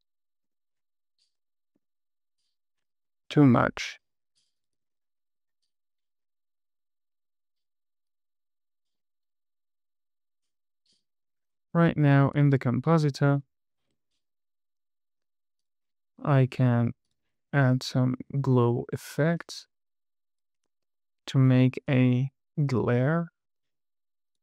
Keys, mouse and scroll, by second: 0.8 space, 1.7 KP_1, 2.1 space, 3.2 space, 4.7 click, 4.9 click, 5.1 click, 5.3 click, 5.5 click, 5.7 click, 5.9 click, 6.0 click, 6.3 click, 6.7 click, 7.1 space, 7.6 space, 8.4 click, 9.3 space, 11.3 space, 13.3-16.1 drag, 17.4 click, 18.2 click, 19.0-19.9 scroll up 4, 19.7 middle click, 20.1 click, 21.2 shift+a.